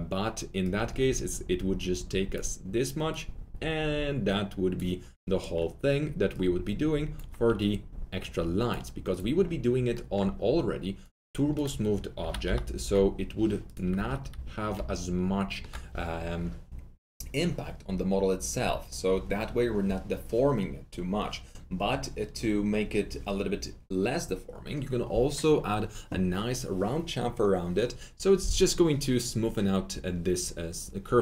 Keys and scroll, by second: 12.1 t, 12.8 Return, 13.8 F3, 13.9 F3, 14.0 F4.